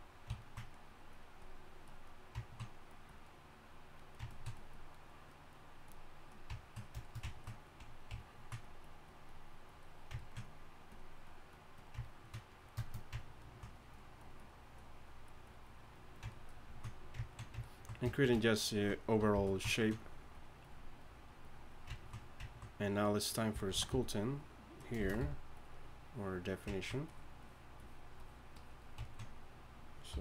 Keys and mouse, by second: 2.4-3.3 drag, 6.9 drag, 7.3-12.9 drag, 13.4 click, 13.5-16.9 drag, 19.3 f, 21.9-23.7 drag, 23.7 c, 23.9 f, 25.0 shift+c, 25.2 f, 26.7 drag, 29.0 drag, 29.4-30.2 drag, 30.1 y.